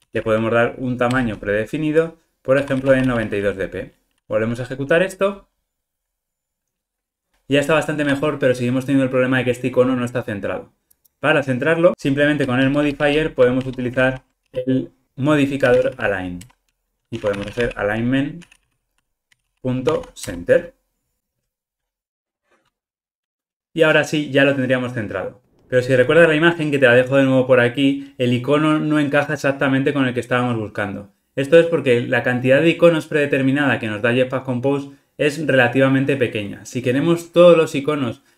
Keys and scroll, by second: 4.1 ctrl+r, 16.4 Return, 21.4 ctrl+r.